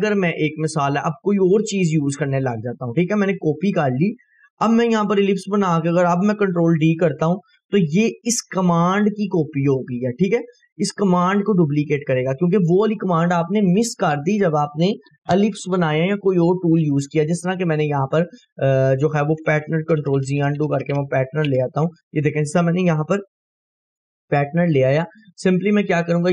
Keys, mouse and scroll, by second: 0.0 scroll down 1, 2.3-5.6 drag, 6.7 ctrl+d, 10.9 click, 16.7 click, 17.6 Delete, 18.1-18.7 click, 18.7-19.8 scroll down 2, 22.6-23.3 scroll up 2, 23.3-24.5 scroll up 1, 24.5-26.3 drag.